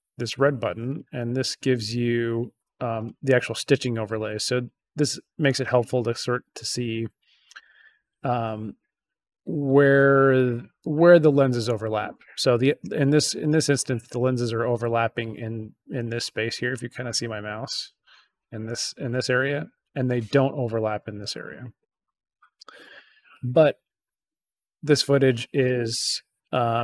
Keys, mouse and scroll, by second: 0.8 click.